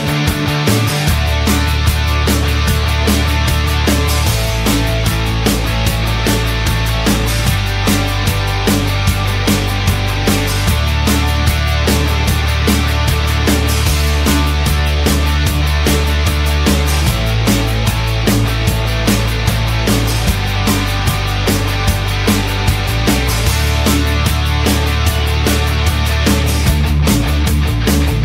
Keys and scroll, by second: 17.6 Return, 17.7 Return.